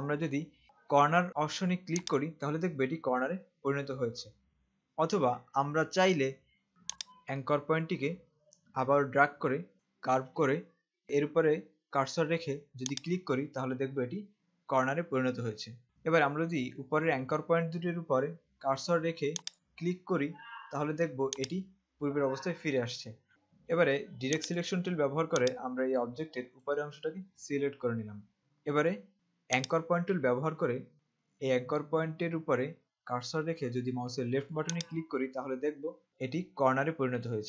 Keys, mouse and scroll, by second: 2.2 click, 7.0 click, 13.1 click, 15.9 z, 19.6 click, 23.3 z, 24.4 click, 29.8 click, 34.8 click.